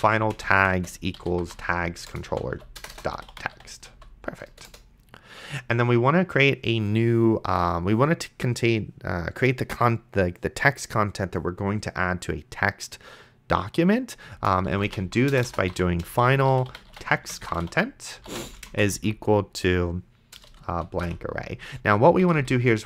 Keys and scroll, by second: 0.0-4.4 typing, 2.1 Return, 4.5 Return, 14.4-19.1 typing, 20.7 shift+', 21.0 ;, 22.2 Left.